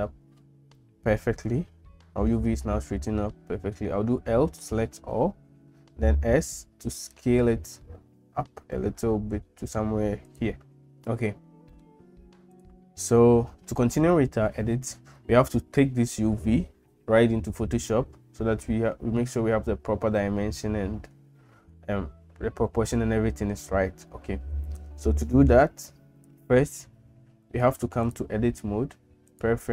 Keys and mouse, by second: 4.0 l, 6.1 s, 11.7 middle click, 12.5 click, 28.1-29.7 drag.